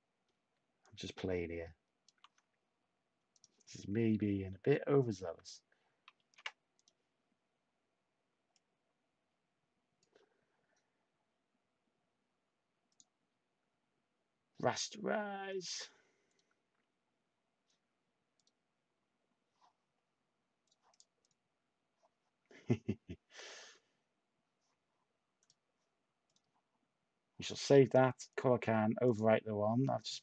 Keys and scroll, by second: 6.1 ctrl+z.